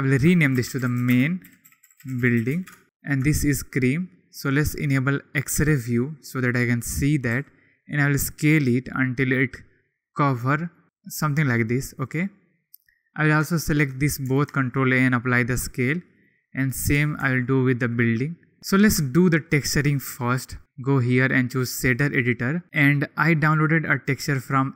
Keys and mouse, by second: 3.3 shift+click, 4.3 click, 5.5 KP_1, 7.3 s, 12.0-13.1 drag, 13.6 shift+click, 14.4 ctrl+a, 16.1 click, 17.1 ctrl+a, 18.6 KP_1, 19.1 shift+click, 20.9 drag.